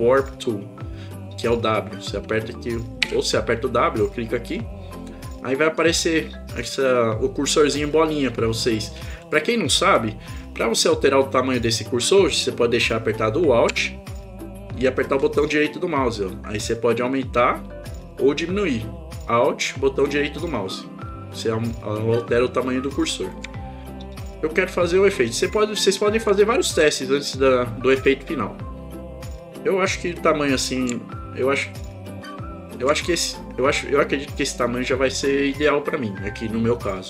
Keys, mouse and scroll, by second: 3.1 w, 15.2-21.6 alt+right drag, 22.3 alt+right click, 23.2 alt+right click, 23.8-25.7 alt+right drag, 31.0-32.8 alt+right drag.